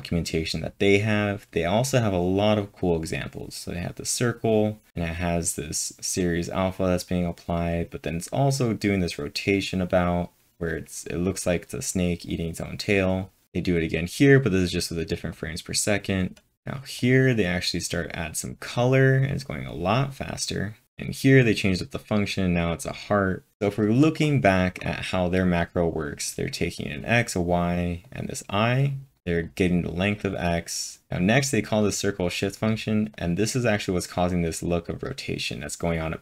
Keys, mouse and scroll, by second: 0.6-1.4 typing, 0.9 scroll down 1, 1.0-1.5 scroll down 1, 1.5-3.1 scroll down 3, 3.3-4.9 scroll down 5, 13.1 scroll down 10, 14.0-14.7 scroll down 3, 15.3 click, 15.3-16.0 scroll down 1, 15.8-16.5 typing, 16.0 click, 16.0-16.7 scroll down 4, 16.9 click, 20.8 scroll down 5, 23.5-23.9 scroll up 6, 26.7-29.4 drag, 26.7-27.0 scroll up 1, 29.4-31.1 drag, 31.3 click, 31.6-36.2 drag.